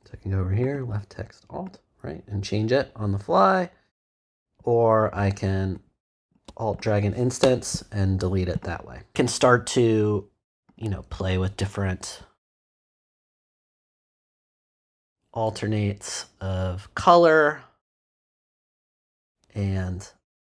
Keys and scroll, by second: 7.4 alt+BackSpace.